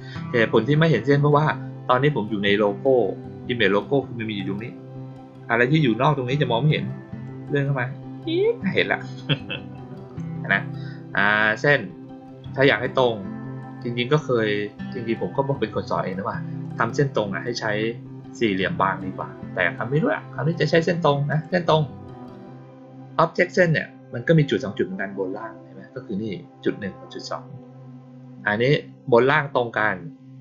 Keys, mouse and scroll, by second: 7.2-10.1 drag, 16.5 click, 21.2 click.